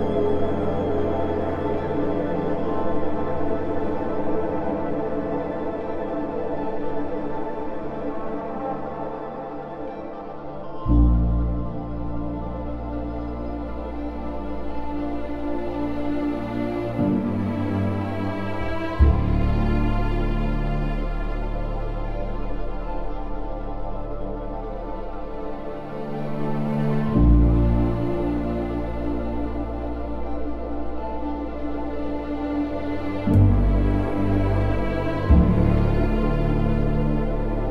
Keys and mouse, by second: 1.1 click, 1.5 ctrl+x, 1.9 1, 2.3 click, 4.2 j, 7.8 Tab, 12.1 Tab, 12.7 Tab, 13.0 z, 15.2 Tab, 16.4 a, 17.1 shift+middle click, 19.5 g, 19.8 x, 20.7 click, 21.2 s, 21.4 x, 24.4 click, 25.2 KP_3, 27.7 g, 29.2 click, 30.6 2, 31.2 alt+click, 31.5 1, 31.9 alt+z, 33.0 alt+z, 33.2 click, 34.3 g, 34.9 click, 35.6 click, 36.0 g, 36.6 click, 37.4 click.